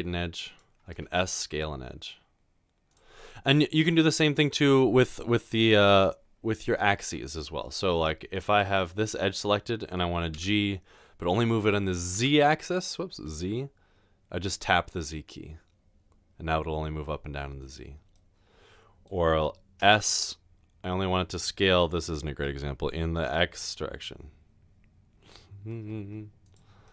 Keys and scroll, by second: 0.9 typing, 10.4 typing, 12.1-13.0 typing, 19.7-20.4 typing, 23.3 typing.